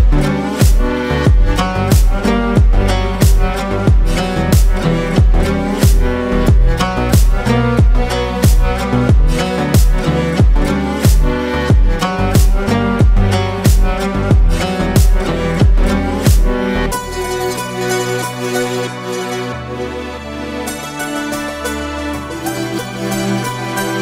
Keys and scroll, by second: 3.7 ctrl+shift+space, 5.1 ctrl+shift+space, 6.2 ctrl+shift+space, 8.9 ctrl+g, 9.7 ctrl+space, 18.8 ctrl+space, 21.3 ctrl+space.